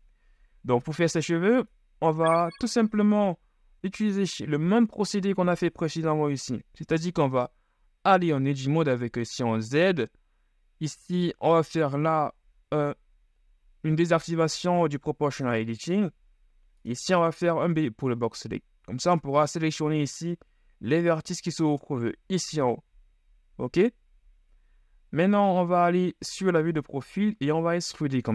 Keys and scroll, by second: 8.5 z, 17.1 b, 25.4 KP_3, 27.5 e.